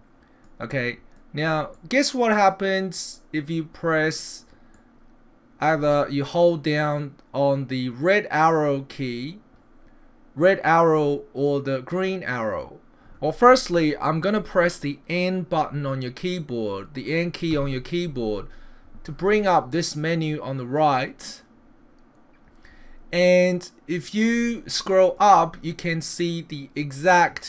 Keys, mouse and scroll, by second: 0.5 click, 1.8 middle click, 4.7 middle click, 17.5 n, 20.8 click, 24.8 click.